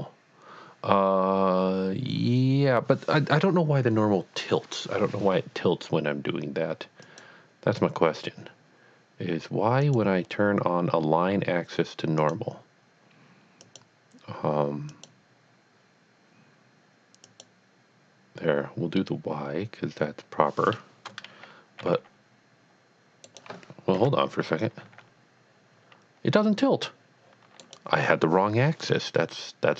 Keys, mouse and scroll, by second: 7.0 click, 7.3 click, 9.8 click, 12.2 click, 13.6 click, 14.9 click, 17.3 click, 19.0 middle click, 21.8 g, 23.3 right click, 24.0 KP_1, 24.8 g, 27.7 right click.